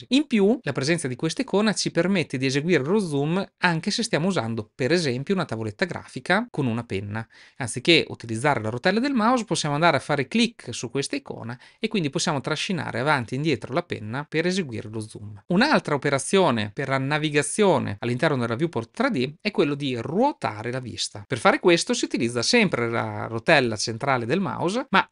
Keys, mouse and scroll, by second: 11.3-15.4 drag.